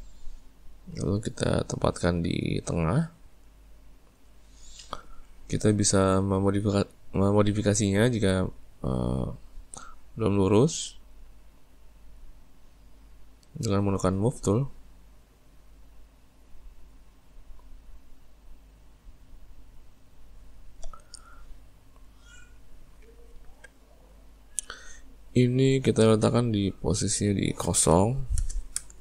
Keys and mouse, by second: 3.4 right click, 6.7 click, 8.0 click, 12.1 click, 13.0 click, 14.9 click, 17.8 click, 18.7 click, 27.1-29.0 drag.